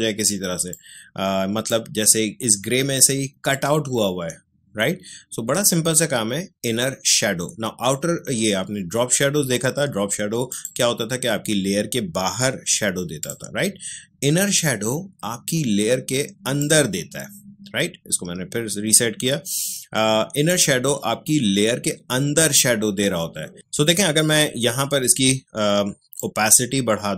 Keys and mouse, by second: 0.7-10.5 drag, 13.1 click, 20.4 click, 26.1-27.1 drag.